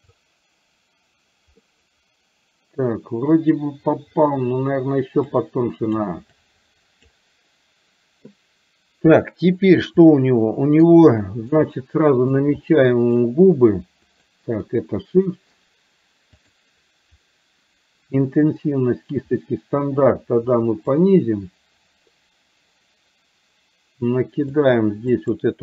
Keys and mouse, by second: 1.6-3.6 middle drag, 5.3 click, 6.4 click, 10.1 middle click, 11.3 shift+middle click, 11.6 middle click, 12.6 shift+middle click, 14.0 shift+click, 16.4 click, 18.6-20.9 drag, 24.6 click, 25.1 click.